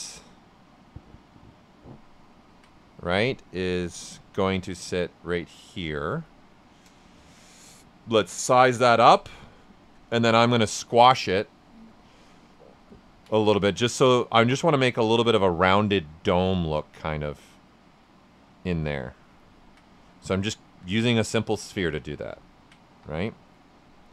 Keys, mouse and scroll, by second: 0.2-2.2 drag, 2.2 ctrl+right click, 4.9-6.2 drag, 6.2 right click, 8.9 click, 9.1-10.9 right drag, 10.9 click, 12.9 ctrl+right click, 13.2 right click, 13.6 ctrl+right click, 14.5-19.4 drag, 19.4 ctrl+right click, 20.6 q, 21.0 right click, 21.6 right click, 22.9 w.